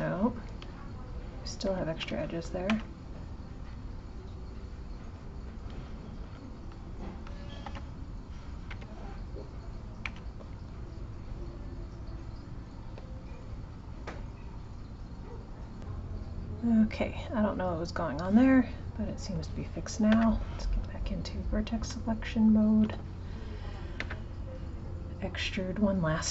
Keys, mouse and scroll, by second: 6.1 click, 10.0 x, 16.7 click, 18.0-20.1 drag, 20.1 1, 20.6 click, 24.0 e.